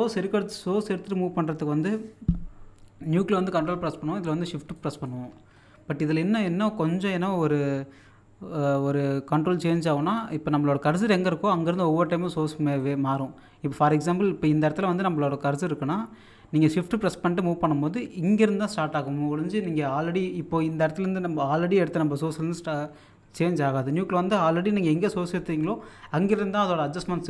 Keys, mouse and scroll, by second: 4.4 ctrl+click, 5.5-6.4 scroll up 1, 11.5 scroll up 1, 11.7-16.2 shift+drag, 16.3-18.3 shift+drag, 18.3-27.2 shift+drag.